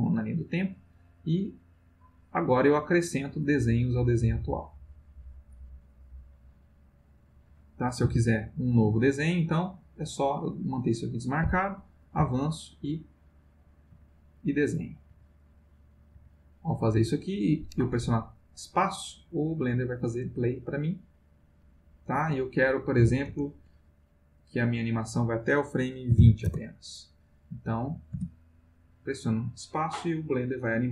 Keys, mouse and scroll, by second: 0.1-6.0 drag, 6.5-7.5 drag, 8.0 Delete, 8.9 click, 10.6 click, 12.2 Right, 13.0 click, 13.9 Right, 14.4 click, 15.1 Right, 15.4 click, 16.1 Right, 16.4 click, 19.5 click, 20.2 space, 22.2 F1, 23.0 F1, 23.3 space, 24.6 click, 25.9-26.7 typing, 28.1 space.